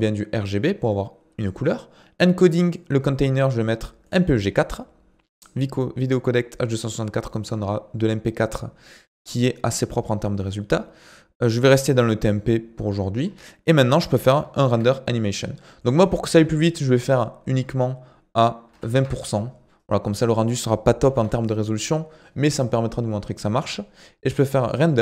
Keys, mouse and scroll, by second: 1.4-5.8 drag, 13.2-14.7 scroll up 4, 14.7 ctrl+s, 15.8-18.9 drag, 21.1 ctrl+s, 24.6-25.0 drag.